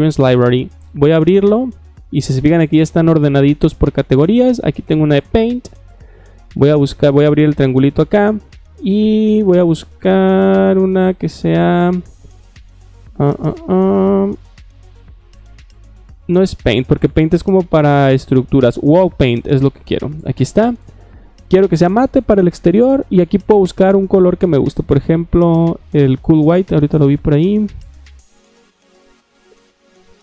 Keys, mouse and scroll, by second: 0.9 click, 5.1 click, 5.8 click, 7.2 click, 7.7 middle click, 16.6 click, 19.0 click, 19.5 middle click, 20.3 click, 20.9 middle click, 21.6 click, 23.4 scroll down 1, 26.4-27.6 scroll down 2, 27.6-28.0 middle drag, 28.0-29.0 scroll down 1, 29.0-30.2 scroll down 1.